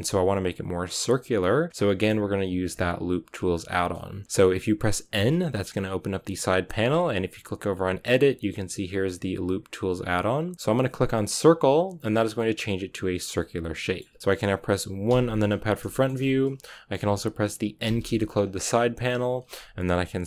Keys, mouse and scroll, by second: 5.0 n, 11.4 click, 12.0 scroll down 3, 12.3-15.0 middle drag, 15.0 KP_1, 15.8 shift+middle click, 16.0 scroll up 2, 16.6-17.7 shift+middle drag, 17.7 n, 18.3-20.2 scroll up 2.